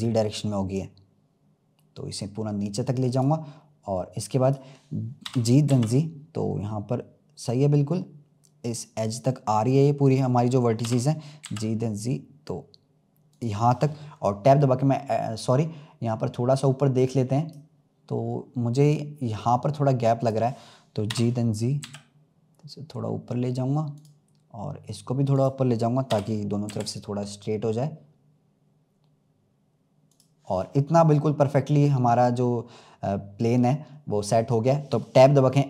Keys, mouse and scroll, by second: 4.4 click, 5.2 g, 10.0 click, 10.8 g, 15.9-16.4 scroll up 1, 16.7-19.8 drag, 20.1 click, 21.0 g, 25.3 click, 26.0 g, 30.5-31.5 scroll down 4, 33.9-35.5 scroll up 1.